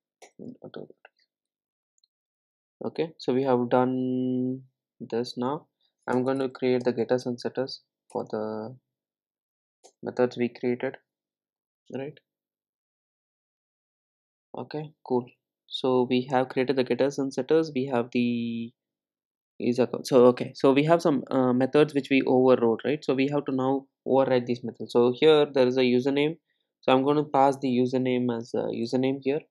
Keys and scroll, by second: 7.1 super+n, 28.9 Return.